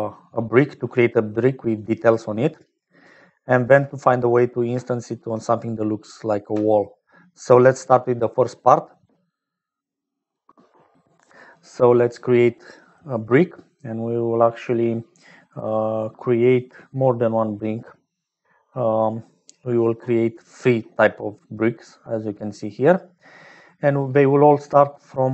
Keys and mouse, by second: 0.0-3.8 typing, 2.4 click, 2.8 click, 4.8 shift+click, 6.8 click, 7.6-25.3 typing.